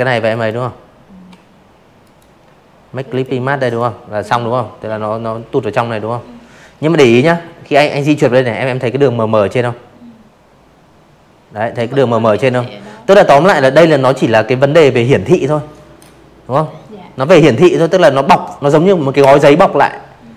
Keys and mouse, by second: 0.0 click, 0.6 click.